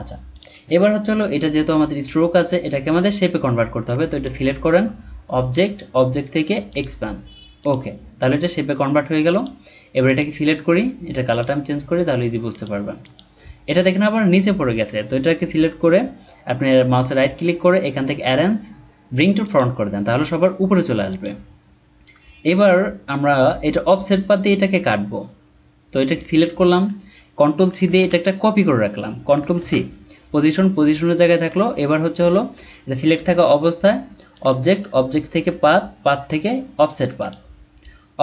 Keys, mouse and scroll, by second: 16.9 right click, 27.7 ctrl+c, 29.5 ctrl+c.